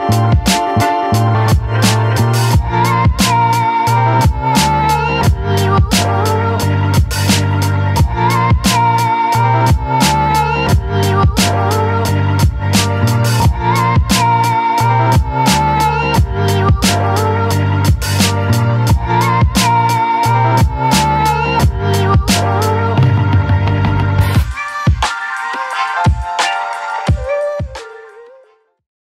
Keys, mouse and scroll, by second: 2.3-6.3 ctrl+drag, 6.3 shift+d, 8.9 click, 9.3 space, 9.7-11.9 alt+drag, 11.9-29.0 alt+drag.